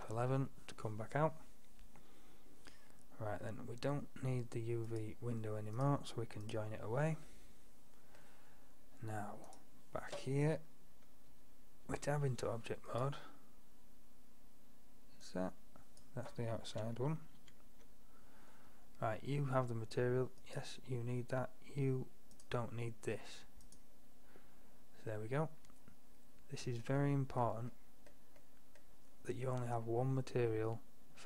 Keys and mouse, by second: 0.0 F12, 0.0 F11, 4.9-6.9 middle drag, 7.3 middle click, 7.5-7.8 middle drag, 9.0 click, 11.4 Tab, 12.9-14.9 drag, 15.3-16.1 drag, 17.0 click, 17.5 ctrl+z, 20.5-22.3 drag, 22.4-23.8 drag, 28.4 middle drag, 30.1-31.2 middle drag.